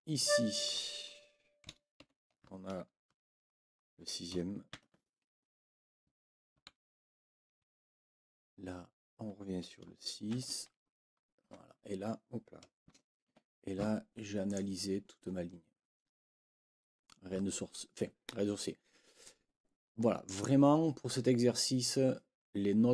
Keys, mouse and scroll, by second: 0.2 click, 2.0 ctrl+l, 6.1 Right, 7.5 Right, 12.8 BackSpace, 13.3 Escape, 14.5 click, 19.2-20.4 drag.